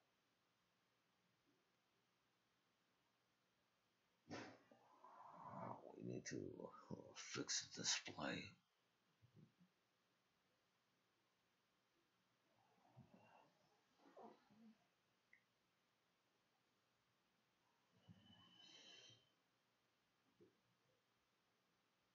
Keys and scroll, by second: 17.9 0.